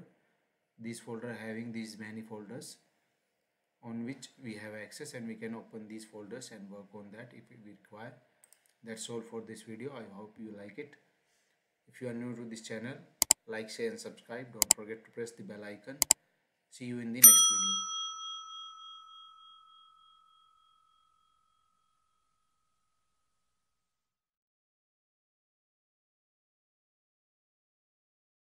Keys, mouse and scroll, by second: 8.4 click.